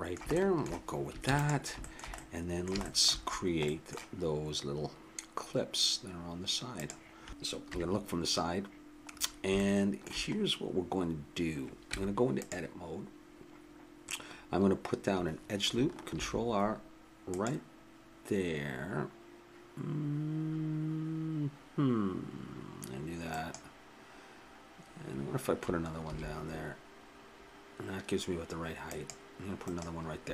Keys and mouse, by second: 1.2 ctrl+s, 2.1 middle click, 3.0-6.9 middle drag, 7.3 click, 7.6 middle click, 7.6 KP_3, 11.2 middle click, 11.9 Tab, 16.1 ctrl+r, 26.0 ctrl+r.